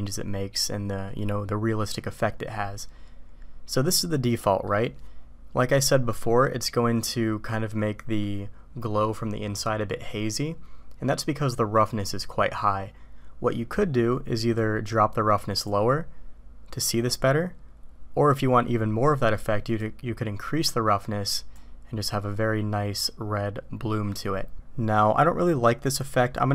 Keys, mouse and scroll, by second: 3.9 click, 14.6-15.7 drag, 14.9 right click, 19.8-21.9 drag.